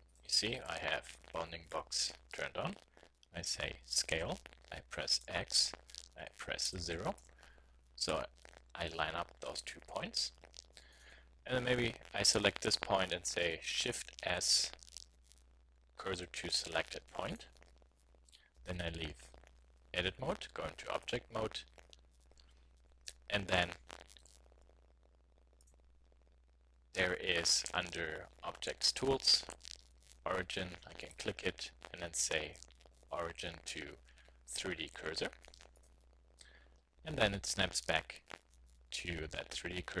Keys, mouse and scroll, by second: 0.0 click, 2.4 click, 4.0 s, 10.9-12.8 drag, 14.1 shift+s, 18.6 Tab, 25.5-27.4 drag, 30.9-32.2 drag, 32.8 click, 38.4 z.